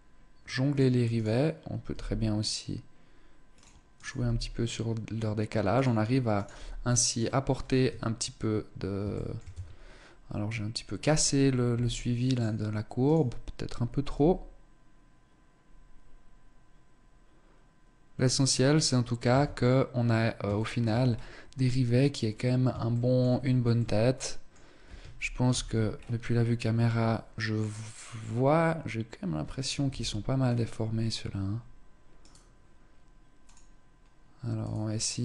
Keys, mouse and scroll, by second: 0.3 click, 0.7 right click, 1.5 g, 3.2 click, 3.5 right click, 3.7 g, 5.3 click, 5.9 right click, 6.1 g, 6.9-7.3 scroll down 2, 7.3 Tab, 8.3 shift+middle click, 8.7 Tab, 9.3 scroll up 2, 10.0 scroll down 1, 10.6 right click, 11.3 s, 12.7 right click, 13.6 g, 18.9 Tab, 19.2-19.7 scroll down 1, 19.7-20.1 scroll down 1, 20.1 shift+middle click, 20.6-21.8 scroll up 3, 21.8-22.3 scroll down 1, 22.5 shift+middle click, 22.9 middle click, 25.0 KP_0, 25.5-25.9 scroll up 4, 29.4 KP_1, 31.7 right click, 33.0 click, 34.1 click, 34.9 click.